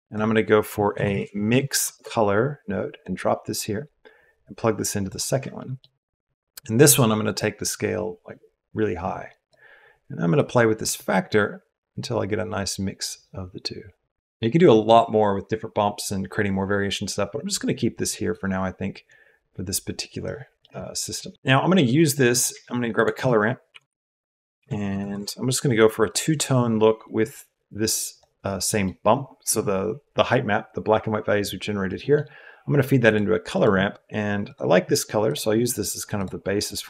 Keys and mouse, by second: 4.2-5.0 drag, 5.5 click, 7.4-9.4 drag, 10.4-14.6 drag, 18.2-20.2 drag, 20.7 middle click, 21.3 middle click, 22.3 click, 22.4 shift+a, 27.0 right click, 27.2-28.2 right drag, 28.8 click, 31.8 click, 33.0 click, 33.5 click, 36.7 drag.